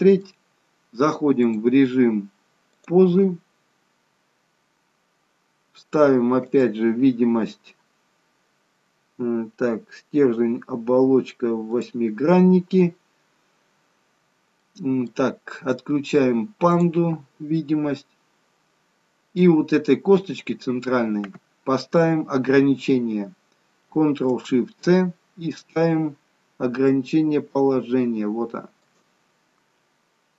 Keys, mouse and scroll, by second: 1.3 click, 6.4 click, 14.4 middle click, 16.6 click, 17.4 middle click, 24.8 ctrl+shift+c.